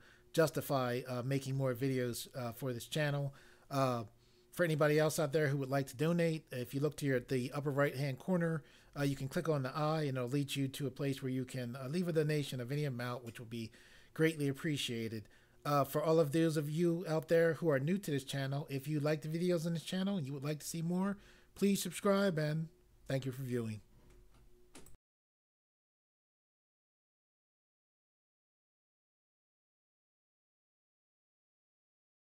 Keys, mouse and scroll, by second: 24.8 click.